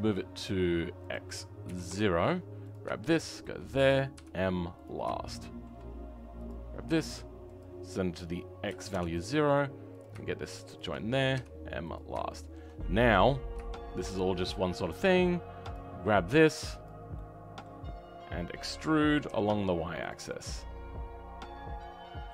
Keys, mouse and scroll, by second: 3.4 shift+click, 4.8 m, 5.2-6.4 shift+middle drag, 6.4 click, 8.9-10.7 drag, 11.9 m, 12.2-14.3 shift+middle drag, 14.3-15.0 scroll down 1, 15.7-16.8 drag, 17.1-18.6 middle drag, 18.6 e, 20.2-22.3 middle drag.